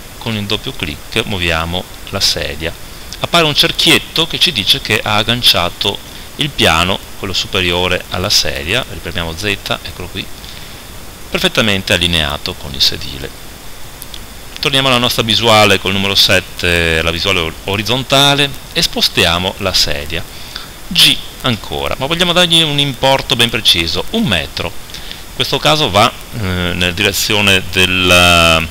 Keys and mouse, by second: 6.9 middle click, 8.4 z, 8.8 middle click, 9.9 click, 13.5 KP_7, 14.3 z, 21.6 g.